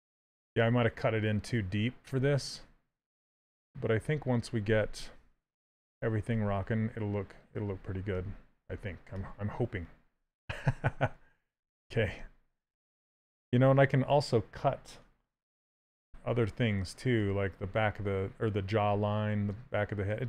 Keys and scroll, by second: 2.8 s, 4.9 ctrl+z, 5.9 s, 16.1 s.